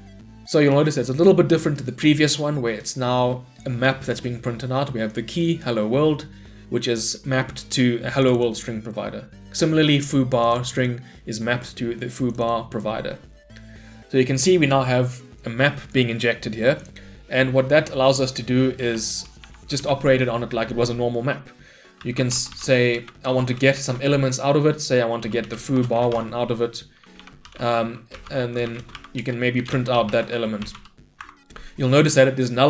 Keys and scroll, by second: 19.8 Delete, 27.0 Return, 30.2 Tab, 31.2 Escape.